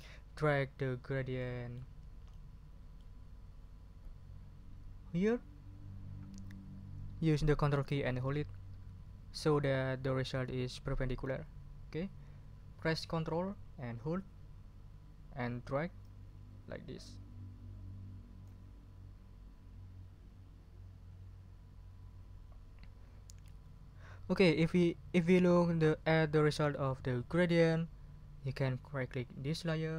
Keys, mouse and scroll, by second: 1.9-2.5 ctrl+scroll down 4, 16.0-18.6 ctrl+drag.